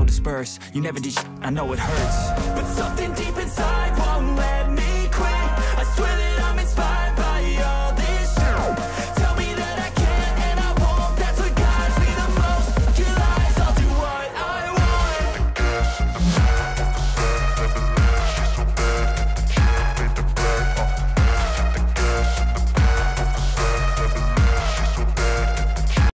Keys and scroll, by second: 0.2 F4.